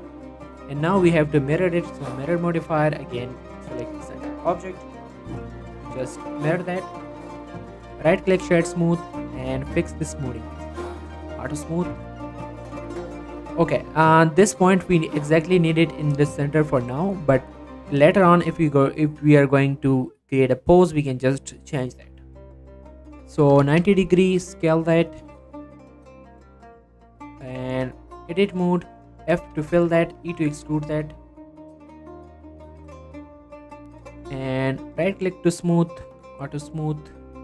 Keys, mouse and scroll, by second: 1.1 click, 3.9 middle click, 4.0-4.9 scroll down 1, 5.6 click, 5.9 scroll down 1, 6.1 middle click, 6.6 scroll up 1, 7.0 click, 8.5 click, 14.0-14.4 scroll up 1, 15.0 click, 15.6 shift+s, 15.9 shift+middle click, 16.6 shift+a, 20.3 click, 21.0 s, 21.8 click, 22.0 r, 22.2 x, 25.0 click, 25.2 middle click, 25.5 z, 25.8 middle click, 26.2 z, 26.9 g, 27.2 y, 27.4 right click, 27.7 Tab, 28.7 click, 29.4 f, 30.2 r, 30.8 right click, 31.2 e, 32.3 click, 32.5 Tab, 32.9 scroll down 1, 33.0 middle click, 34.4-34.9 scroll up 1, 34.9 right click, 35.1 middle click, 35.5 click.